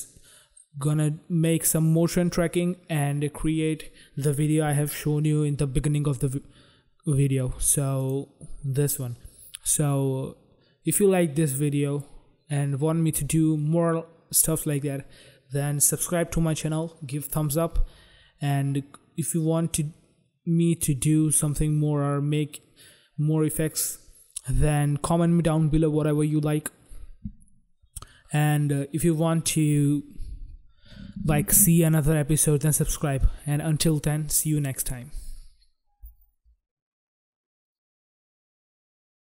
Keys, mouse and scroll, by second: 8.2 click, 8.3 click, 9.0 click, 9.1 click, 11.8 click, 12.2 click, 38.3 click, 38.5 click.